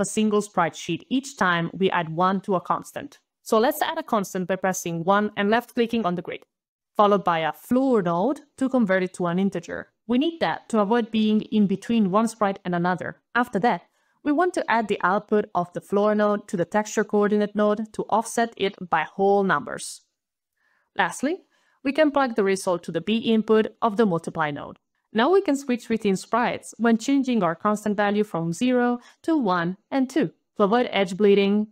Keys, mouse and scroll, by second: 3.3 click, 4.4-4.9 1, 4.8 click, 4.9 click, 4.9 1, 5.1 click, 6.7 click, 7.1-8.4 typing, 9.7 click, 9.8 click, 10.2-11.9 typing, 13.0 click, 13.3 click, 16.0-17.1 typing, 17.6 click, 18.3 click, 20.3 click, 21.4 click, 21.7 click, 24.9 click, 25.0 click, 25.5 click, 25.8 1, 26.2 Return, 27.5 2, 27.8 Return, 29.2 0, 29.5 Return, 30.7-31.7 typing.